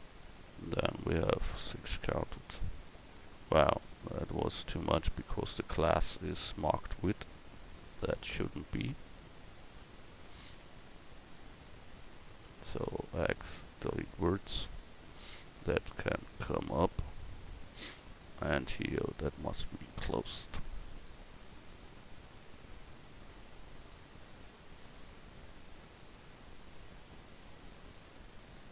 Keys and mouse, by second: 0.7 x, 3.8 ctrl+z, 10.2-11.3 drag, 11.3-12.8 middle drag, 12.8 x, 14.6 click, 15.4-17.5 middle drag, 19.3 middle click, 20.2-26.0 drag, 22.2 right click.